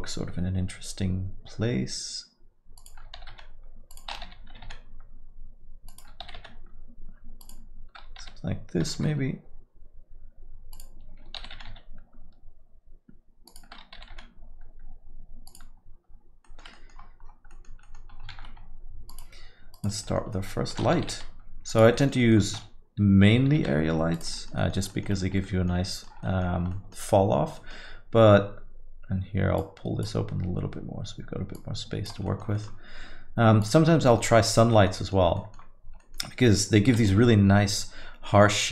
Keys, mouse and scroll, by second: 36.3 typing.